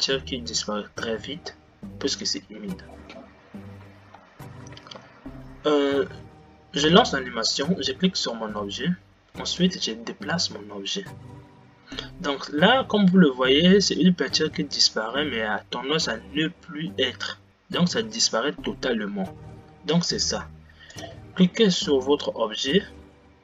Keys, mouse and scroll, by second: 4.4 Right, 5.3 Left, 7.0 space, 7.7 click, 10.1 g, 21.1-22.0 drag, 22.5 space.